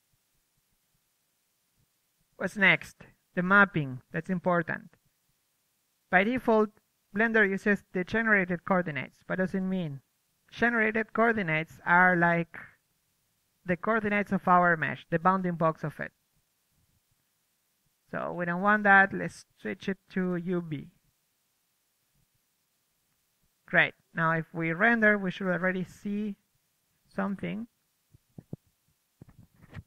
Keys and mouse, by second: 0.0-5.7 right drag, 4.3-12.4 middle drag, 6.1-10.6 right drag, 13.1-15.0 right drag, 15.1 KP_3, 15.7-16.0 middle drag, 19.5 right click, 26.8 KP_1, 28.4 KP_0.